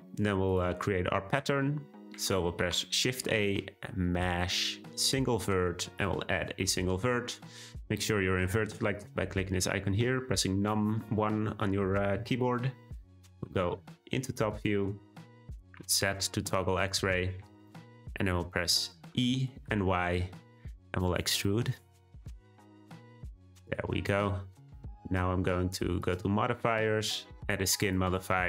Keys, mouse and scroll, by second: 0.5 click, 1.5-2.6 scroll down 1, 2.6 shift+a, 13.4 `, 15.8 z, 17.7-19.1 shift+middle drag, 19.1 e, 24.1-24.8 scroll up 1, 27.9-28.4 drag.